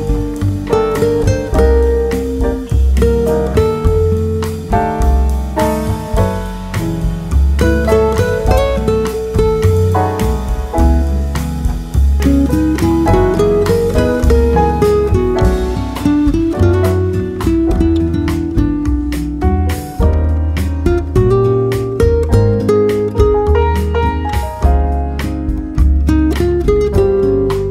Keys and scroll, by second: 22.1 ctrl+c, 23.7 ctrl+v.